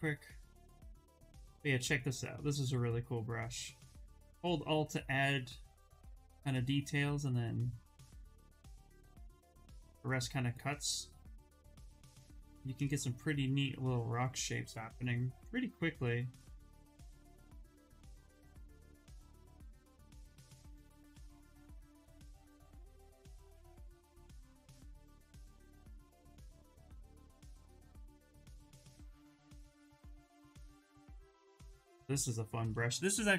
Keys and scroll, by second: 0.3 s, 1.5 s, 13.0 s, 22.1 ctrl+z, 22.3 ctrl+z, 29.7 ctrl+z, 29.9 ctrl+z, 30.2 s.